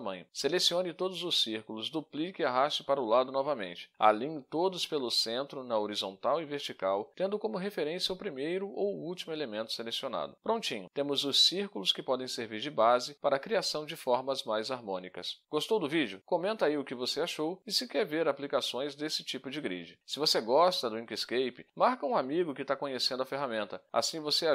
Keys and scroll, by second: 1.1 Delete, 1.7 Delete, 2.1 Delete, 8.5 ctrl+d, 14.5 ctrl+shift+a.